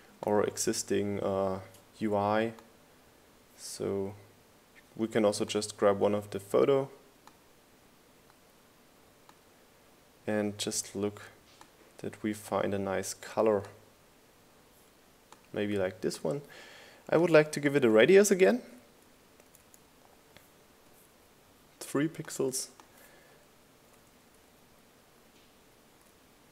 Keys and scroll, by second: 20.2 Up, 21.6 Down, 25.5 Right, 26.0 Right.